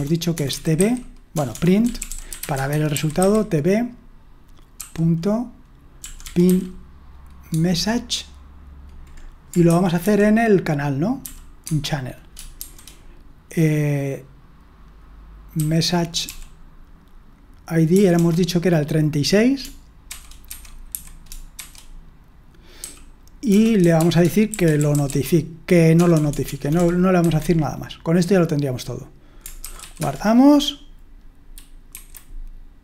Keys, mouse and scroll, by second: 0.0-3.7 typing, 4.8-7.0 typing, 7.5 Tab, 11.0-12.6 typing, 16.0-16.8 typing, 17.9 typing, 20.8-21.6 typing, 22.8-26.7 typing, 27.2 Escape, 29.7-30.5 typing, 31.9 F5.